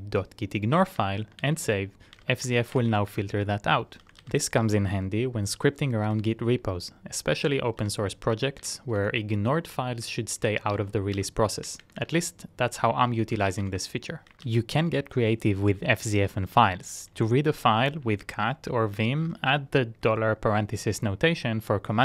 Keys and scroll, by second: 0.0-4.8 typing, 6.1-6.4 typing, 8.0-8.3 typing, 9.2 Return, 10.8-14.8 typing.